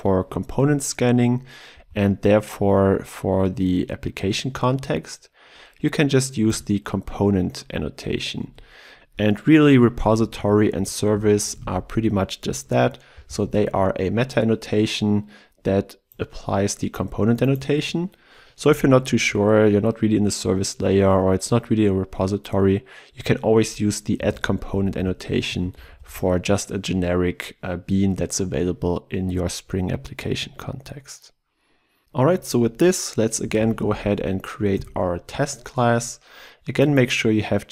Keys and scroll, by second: 6.6 Return, 10.8 ctrl+z, 13.1 ctrl+z, 13.3 ctrl+b, 24.2 ctrl+alt+Left, 33.7 ctrl+shift+t.